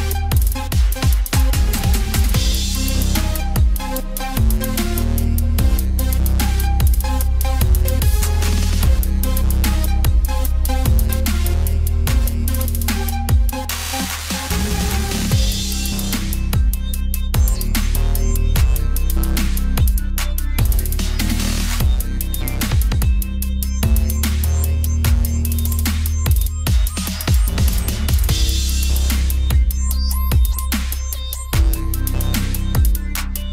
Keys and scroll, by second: 31.2 ctrl+t.